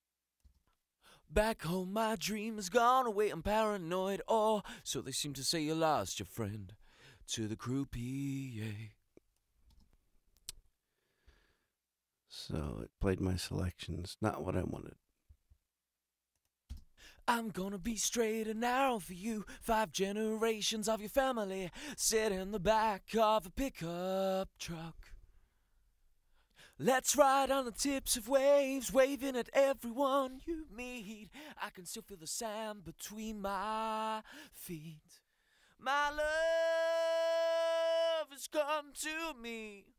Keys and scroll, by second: 0.4 space, 6.4 super+=, 9.7 space, 16.7 space.